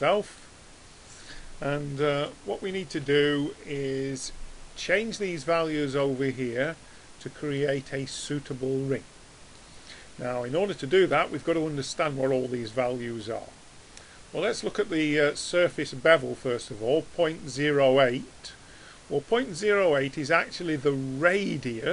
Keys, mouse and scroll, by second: 2.5-2.9 middle drag.